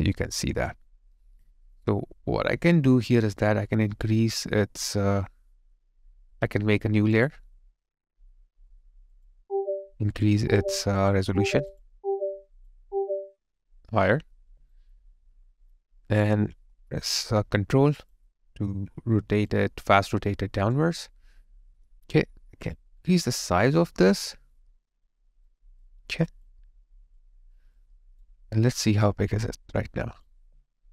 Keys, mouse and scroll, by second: 0.7 alt+click, 14.5 alt+right click, 14.9 alt+click, 19.1 alt+right click, 24.2 alt+click, 25.3 alt+right click, 25.8 alt+middle click, 26.4 alt+click, 27.8 alt+right click.